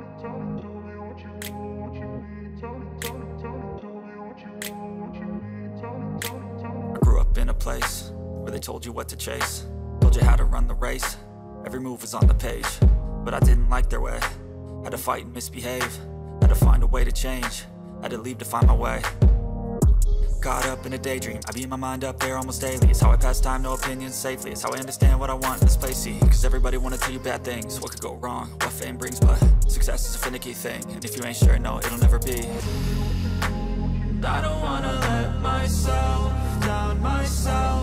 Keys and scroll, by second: 11.9 ctrl+j, 19.7 ctrl+j.